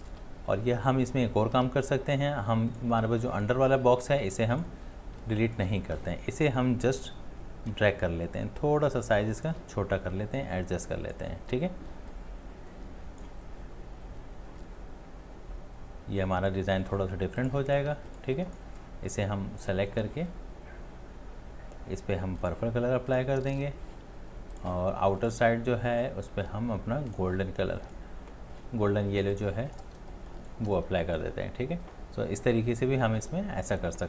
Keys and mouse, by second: 1.6 ctrl+z, 4.4-5.1 ctrl+space, 7.2 alt+click, 7.8 alt+click, 7.8-9.5 shift+click, 8.0 shift+click, 8.1 shift+click, 18.0 space, 29.9 space, 30.5 space, 30.9 space.